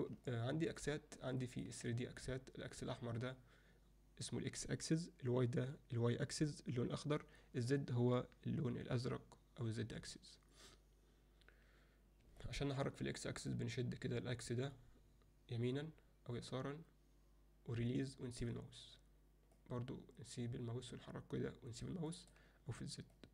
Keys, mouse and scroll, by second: 0.3-0.7 alt+middle drag, 1.4 ctrl+alt+middle click, 12.4-12.8 alt+middle drag, 13.5-18.4 drag, 19.6-21.8 drag, 22.1 alt+middle click, 23.2-23.3 drag.